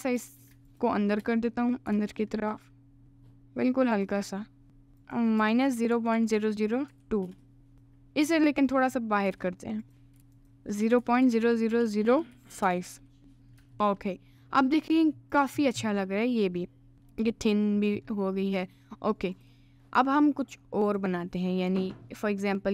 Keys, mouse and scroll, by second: 0.7 alt+shift+click, 1.4 middle click, 1.9 g, 5.0-7.3 drag, 6.3 0, 7.7 click, 8.3 click, 8.7 middle click, 9.2 g, 10.2 g, 10.4-12.7 drag, 11.4 0, 13.4 ctrl+s, 13.4 middle click, 13.7 Tab, 13.9-15.3 middle drag, 15.3 click, 15.8 middle click, 16.6 middle click, 19.4 click, 20.9 click, 22.0 alt+middle click.